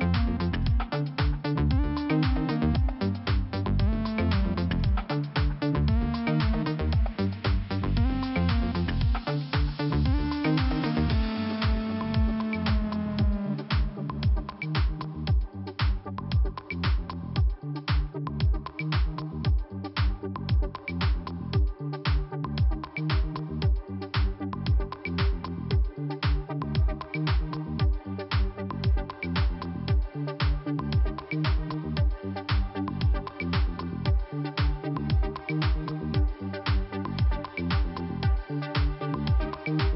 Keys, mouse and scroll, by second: 0.7 click, 1.2 click, 2.7 click, 4.0 click, 4.1 click, 4.5 scroll up 1, 5.0 click, 6.6 click, 7.9 click, 9.2 click, 11.3 click, 13.3 click, 15.0 click, 16.2 click, 16.3 click, 17.1-17.4 scroll down 1, 20.2 alt+Delete, 21.4 p, 22.9 click, 25.9 click, 27.4 click, 27.5 click, 28.3 click, 36.2 click.